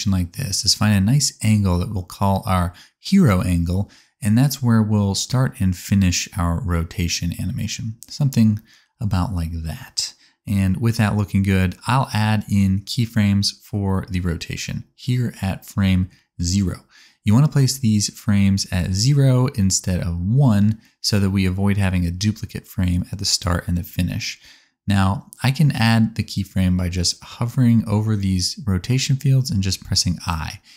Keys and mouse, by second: 0.5-4.4 middle drag, 0.9 KP_0, 2.3 KP_0, 4.4-13.0 drag, 13.0 middle click, 13.4-30.7 drag, 29.8 i.